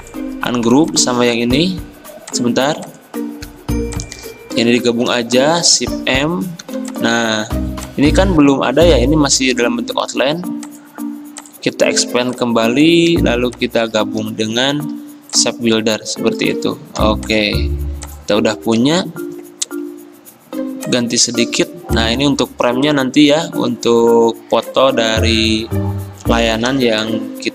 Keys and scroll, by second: 2.0 ctrl+z, 5.2 m, 6.7 v, 8.6 ctrl+z, 14.6 m, 17.0 v, 19.9 F6, 20.2 F6, 26.7 v.